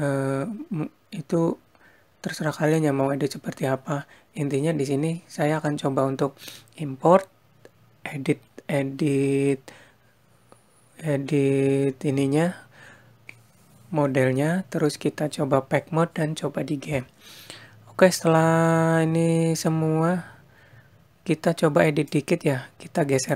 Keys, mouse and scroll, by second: 21.6 click.